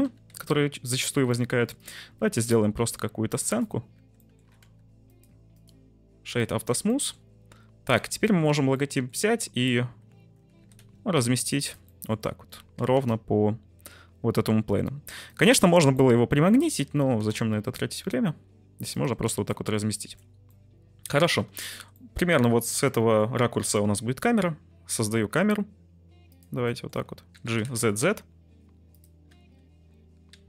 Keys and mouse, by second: 0.0 e, 0.2 z, 0.9 click, 1.3 click, 1.7 middle click, 2.0 ctrl+b, 3.2 middle click, 3.5 click, 3.9 Tab, 4.2 middle click, 4.4 s, 4.6 x, 5.0 click, 5.6-6.3 drag, 7.0 middle click, 8.3 shift+middle click, 8.8 middle click, 10.5 g, 10.7 z, 11.5 shift+click, 11.9 shift+middle click, 12.7 g, 12.9 z, 15.2 shift+click, 15.9-16.7 middle drag, 16.9 g, 17.2 z, 18.9 shift+click, 19.6 middle click, 20.4-21.2 middle drag, 21.7 shift+middle click, 22.0 middle drag, 22.7 middle click, 23.4 shift+middle click, 23.7 shift+a, 26.6 s, 26.7 middle drag, 27.3 g, 27.5 z, 27.7 z, 29.2 `, 30.3 g.